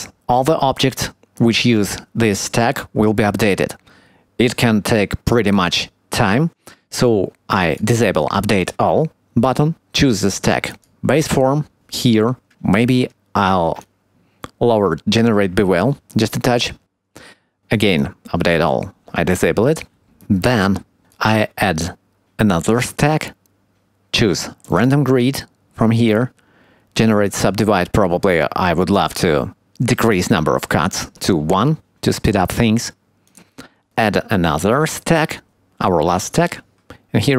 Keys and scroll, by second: 11.5 Tab, 20.0 Tab.